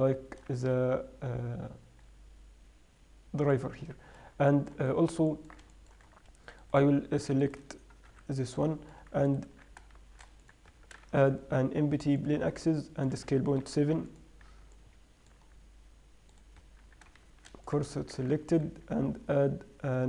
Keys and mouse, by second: 4.0-5.0 drag, 5.0-5.7 middle drag, 8.5 h, 9.9 Tab, 10.4 shift+s, 11.4 Tab, 11.5 shift+a, 13.6 s, 18.6 Tab, 18.6 shift+s.